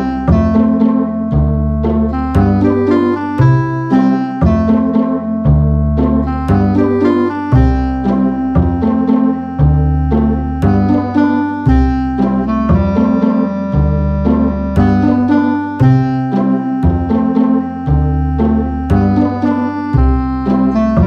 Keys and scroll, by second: 0.4 super+[, 5.1 9, 5.2 Return, 6.7 a, 8.7 v, 9.2 a.